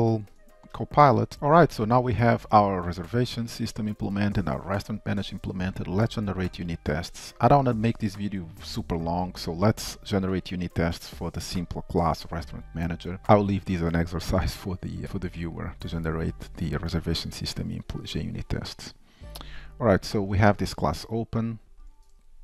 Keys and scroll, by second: 0.3 super+s, 1.3 ctrl+shift+Down, 7.6 ctrl+shift+Up, 18.7 ctrl+shift+Down, 20.4 ctrl+shift+Down, 21.8 shift+super+a.